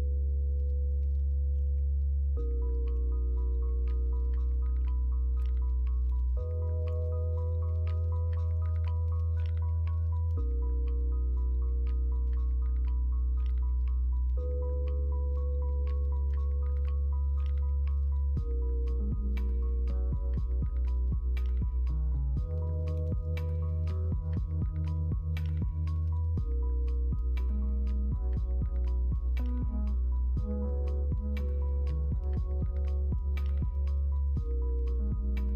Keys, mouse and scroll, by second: 7.5 BackSpace, 12.6 middle click, 12.8 scroll down 1, 13.3-14.4 scroll up 2, 14.4-33.8 middle drag, 33.8 scroll up 1, 34.5 middle click, 35.1 middle click.